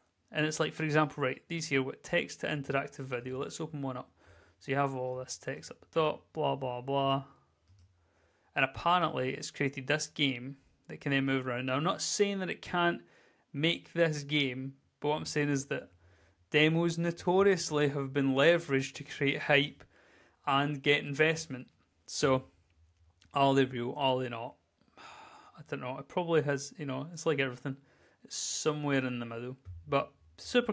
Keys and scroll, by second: 1.0 s, 2.4-3.3 typing, 8.0 Right, 8.2 z, 9.2 w, 9.8 space, 10.2 Right, 10.4 Right, 10.5 Right, 11.3 Right, 12.0-14.3 typing, 12.4 Down, 15.4 z, 16.6 Down, 17.0 Right, 17.3 Left, 17.7 w, 17.9 Left, 18.7-22.9 typing, 18.9 Down, 24.3 w.